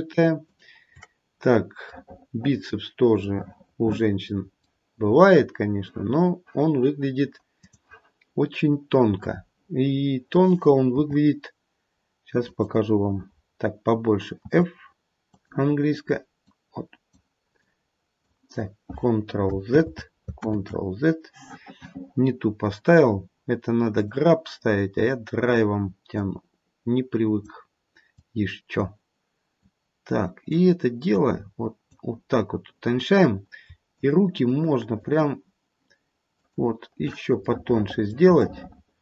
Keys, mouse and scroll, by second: 0.0 shift+click, 1.0 shift+click, 1.9 middle click, 3.4 middle click, 3.8 middle click, 4.1 middle click, 4.3 middle click, 7.7 click, 10.9 f, 14.4 f, 16.4 click, 17.6 click, 20.0 ctrl+z, 20.8 ctrl+z, 24.2 click, 26.1 click, 28.1 click, 29.6 click, 31.1 click, 33.9 shift+click, 34.4 shift+click, 34.9 shift+click, 36.4 shift+click, 38.4 middle click.